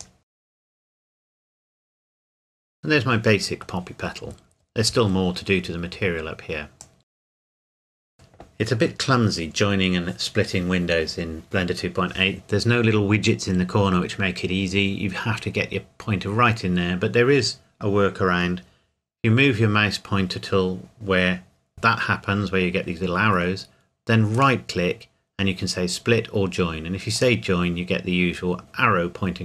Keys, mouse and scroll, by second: 0.0 click, 0.3 g, 0.8 click, 1.4 s, 1.6 click, 1.8 g, 2.1 click, 2.3 Tab, 2.6 middle click, 4.0 scroll down 1, 4.2 scroll up 1, 4.4-6.6 scroll down 1, 6.8 click, 7.3 right click, 7.4 click, 7.6 right click, 7.9 right click, 8.0 click, 24.4 right click, 27.2 click.